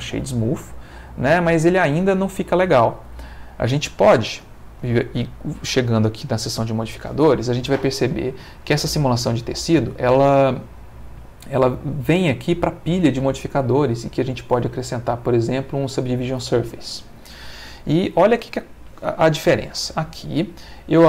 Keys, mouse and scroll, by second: 3.1 Escape, 5.2 click, 8.2 click, 9.7 click, 14.1 click, 15.5 click, 18.4 space.